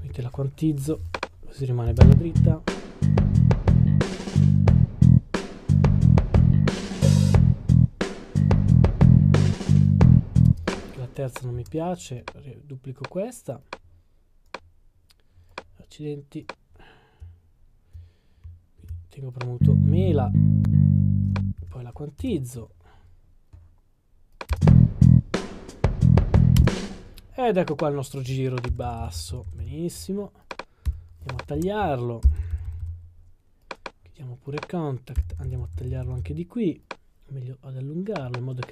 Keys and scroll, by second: 0.0 q, 0.8 q, 21.6 q, 22.2 Return, 24.6 Return, 30.2-30.8 typing, 32.1-33.2 typing, 34.5-35.3 typing, 36.5 typing.